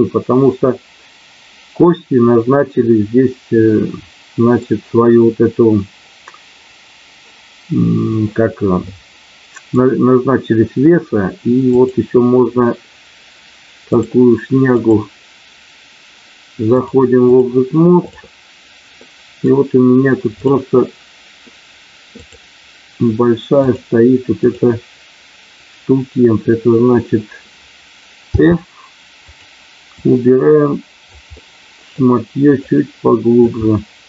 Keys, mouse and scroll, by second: 3.7 middle click, 8.7 middle click, 13.9 click, 14.7 click, 16.7 click, 19.0 middle click, 20.3-21.5 drag, 22.1 click, 23.6-24.7 drag, 29.8-31.0 drag, 31.3 middle click, 32.6 click.